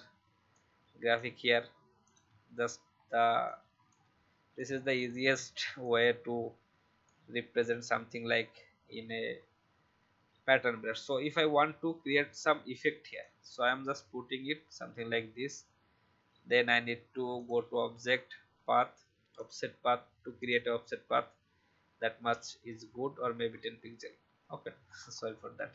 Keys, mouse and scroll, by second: 4.3 v, 5.8-7.0 alt+drag, 11.3 ctrl+z, 12.4 alt+scroll up 1, 13.2 alt+click, 17.3 click, 23.4-23.8 shift+scroll up 1, 24.8-25.7 scroll down 1.